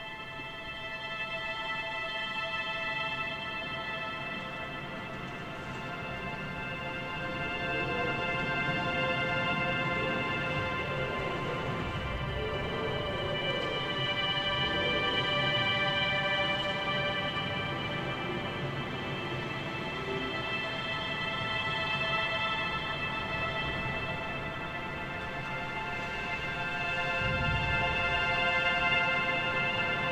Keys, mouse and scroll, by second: 1.3 a, 1.5 a, 1.7-2.0 scroll down 1, 2.0-3.1 shift+middle drag, 3.1 a, 5.2 shift+middle click, 6.1 scroll up 2, 7.0 shift+middle click, 7.6 a, 7.8 a, 8.1 3, 8.3 click, 8.6 click, 9.5 click, 10.4 ctrl+KP_Add, 10.5 ctrl+KP_Add, 11.3 r, 12.2 g, 14.8 a, 15.0 a, 15.3-15.7 scroll down 1, 15.7-17.8 shift+middle drag, 17.8 click, 18.0 click, 18.5 ctrl+KP_Add, 18.9 ctrl+KP_Add, 19.6 scroll up 3, 20.0 g, 22.4 scroll down 2, 23.7 click, 24.2 ctrl+KP_Add, 24.3 ctrl+KP_Add, 25.2 ctrl+KP_Subtract, 26.2 ctrl+i, 27.7-28.1 scroll up 4, 28.7 g.